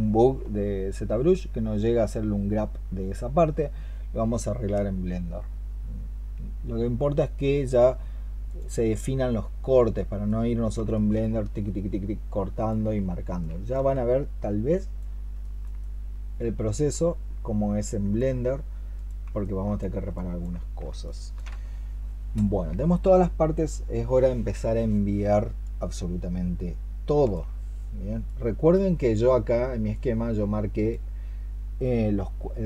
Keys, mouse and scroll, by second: 15.3 alt+click, 15.7 alt+click, 17.9 alt+l, 19.3 alt+click, 20.9 alt+click.